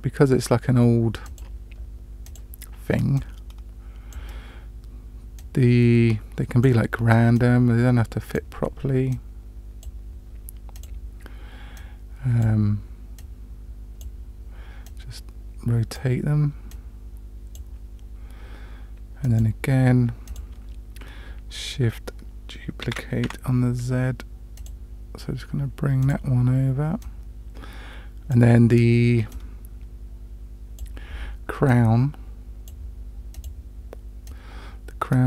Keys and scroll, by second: 22.8 shift+d.